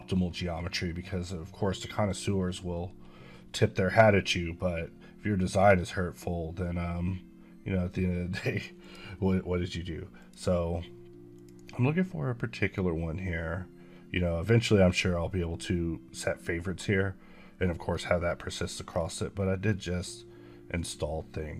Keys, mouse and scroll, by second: 3.3 scroll up 1, 6.9 scroll up 1, 8.7 click, 13.8 click, 17.8 scroll up 2, 20.4-21.5 scroll down 6.